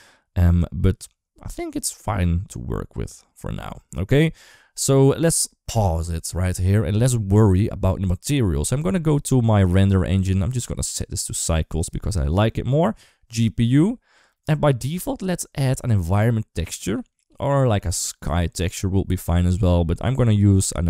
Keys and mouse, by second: 5.5 space, 10.4-11.2 drag, 11.7-12.7 drag, 14.3 click.